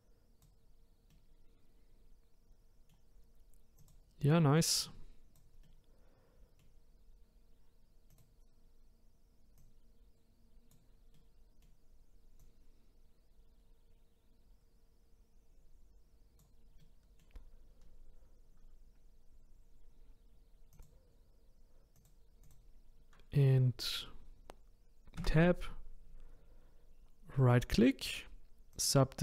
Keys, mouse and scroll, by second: 1.1-3.8 middle drag, 3.8 click, 5.6-7.2 middle drag, 7.2-7.6 scroll up 2, 8.1 click, 11.2-12.4 middle drag, 12.4 click, 16.8-19.8 middle drag, 20.7 click, 22.0 click, 22.5 click, 25.2 Tab, 27.4-29.2 right drag.